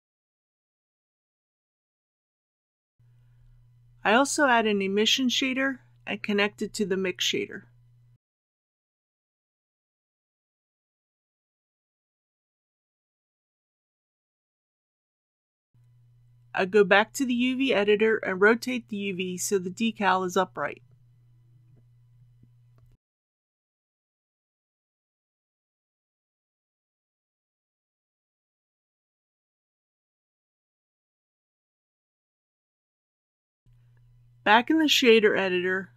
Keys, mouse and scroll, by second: 3.3 shift+a, 6.0-14.0 drag, 22.2-23.2 scroll down 1, 23.2 click, 25.8 r, 27.6 KP_9, 27.8 KP_0, 28.7 ctrl+z, 30.0 r, 30.5 KP_9, 30.7 KP_0, 33.7 click.